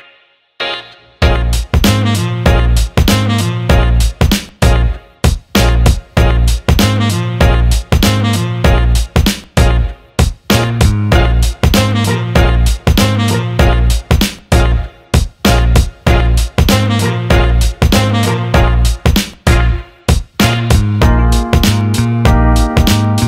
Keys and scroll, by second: 22.1 ctrl+z.